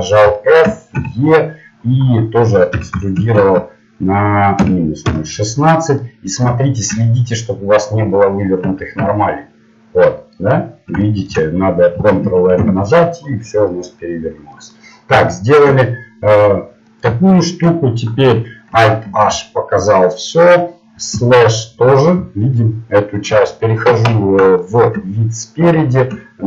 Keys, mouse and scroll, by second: 0.9 e, 6.0-8.2 middle drag, 8.7 a, 9.0 a, 12.6 ctrl+n, 19.1 alt+h, 21.1 KP_Divide, 23.4 KP_1, 25.8 z.